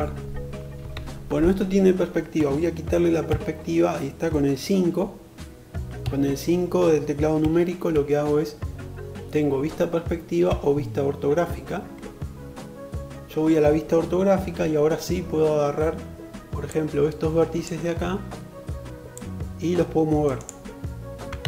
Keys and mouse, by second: 2.4 KP_5, 19.6-21.4 middle drag, 20.5 alt+z.